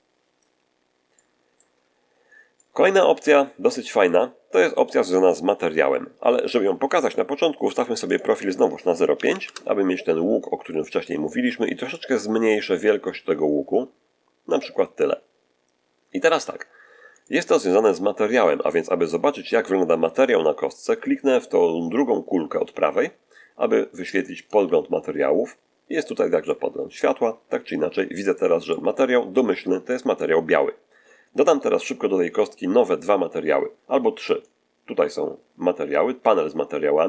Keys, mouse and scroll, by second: 1.0 middle click, 2.4 middle click, 3.3 scroll down 1, 3.7 middle click, 8.0 click, 9.2 ., 9.2 5, 9.3 Return, 11.8-14.6 drag, 16.0 scroll up 2, 16.6 scroll down 2, 17.1 shift+middle click, 24.3 click, 25.9-28.1 middle drag, 28.2-29.3 middle drag, 29.7 middle click, 34.2 click.